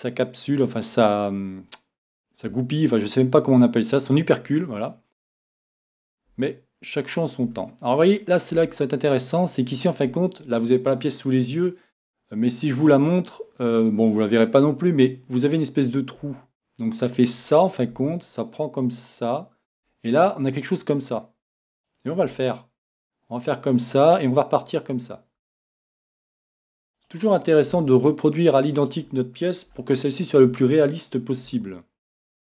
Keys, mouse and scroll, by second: 2.1-4.0 drag, 2.5 e, 4.2-5.8 drag, 5.2 e, 6.1-11.5 drag, 6.3 e, 7.5 e, 8.5 e, 16.2 e, 17.6-21.0 drag, 17.9 e, 19.7 e, 21.9-23.5 drag, 22.2 e, 24.0-26.0 drag, 25.4 e, 27.1-28.8 drag, 27.7 e, 29.1-30.8 drag, 29.8-31.5 middle drag, 31.5 e.